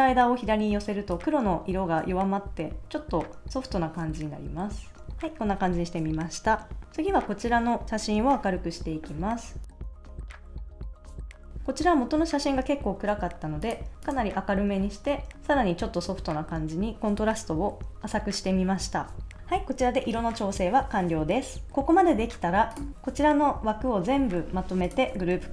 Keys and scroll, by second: 5.0 super+s.